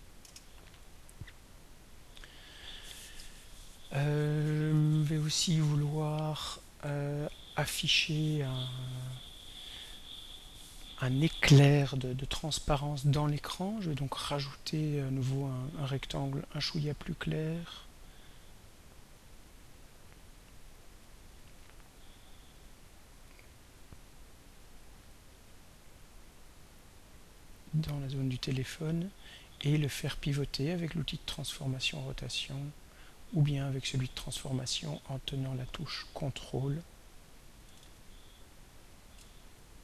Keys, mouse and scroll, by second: 0.2 Return, 1.5 click, 9.7 click, 15.1 click, 17.2 click, 18.8-21.2 drag, 23.3 click, 23.9-25.3 drag, 26.7-27.9 drag, 31.3 click, 34.1 click, 37.7 ctrl+click, 37.8 ctrl+a, 39.1-39.8 ctrl+drag.